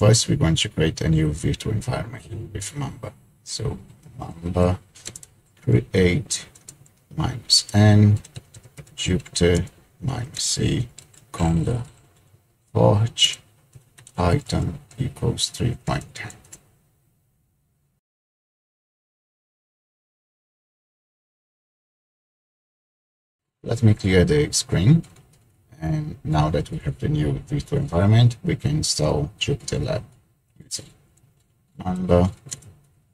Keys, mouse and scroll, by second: 3.8-12.1 typing, 13.2-14.4 typing, 15.6-16.4 typing, 20.8 typing, 25.2 ctrl+l, 30.4-32.5 typing.